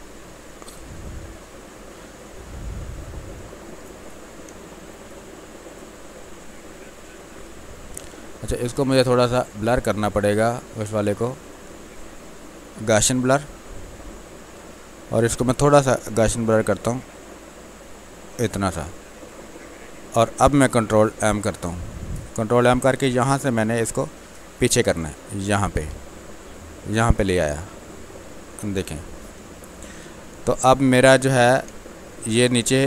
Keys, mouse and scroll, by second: 4.4 space, 4.7-9.4 ctrl+drag, 9.4-13.5 drag, 13.5 space, 13.9-15.3 ctrl+drag, 15.3-19.3 drag, 21.1 ctrl+m, 22.8-25.3 drag, 25.3-27.8 drag, 27.8 click, 29.3 space, 29.7 alt+click, 30.0 alt+click, 31.6 space, 31.9 click, 32.1 space.